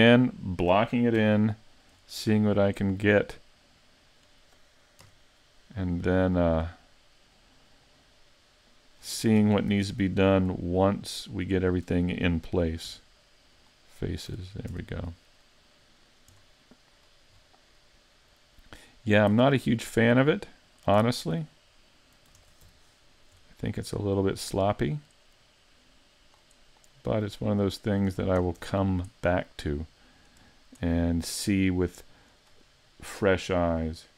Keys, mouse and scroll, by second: 0.2-1.2 scroll up 2, 1.2-2.0 scroll up 2, 1.2 KP_5, 2.0-3.3 scroll down 14, 3.3 middle click, 5.0 KP_Decimal, 5.9-6.5 scroll down 4, 6.7 middle click, 9.4 ctrl+Tab, 10.3 right click, 10.7 shift+right click, 11.1 shift+right click, 11.5 shift+right click, 12.9 x, 14.3 a, 14.7 Tab, 15.1-15.5 scroll down 5, 15.5 middle click, 16.3-17.1 scroll down 2, 17.1 scroll up 3, 17.4-17.8 scroll down 1, 17.8 middle click, 19.4 scroll up 5, 19.8 middle click, 21.0 Tab, 22.4 ctrl+Tab, 23.1 right click, 23.7 shift+right click, 24.1 middle click, 25.8 click, 27.2 click, 28.2 scroll down 3, 28.4 a, 28.6 Tab, 28.8-29.1 scroll down 1, 29.1 middle click, 30.5-30.9 scroll down 1, 30.9 middle click, 32.5-33.7 scroll up 5.